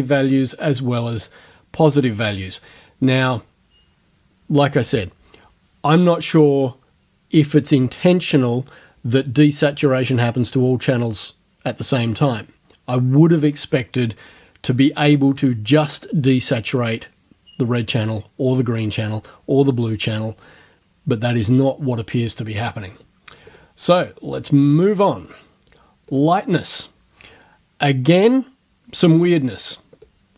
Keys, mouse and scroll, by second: 23.5 click, 24.6 click, 25.0 click, 26.1 click, 30.1 click.